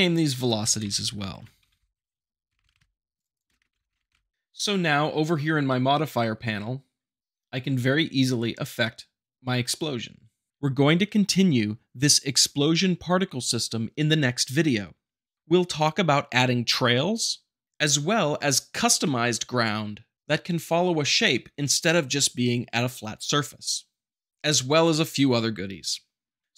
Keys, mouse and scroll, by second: 0.8-4.1 typing, 3.2 click.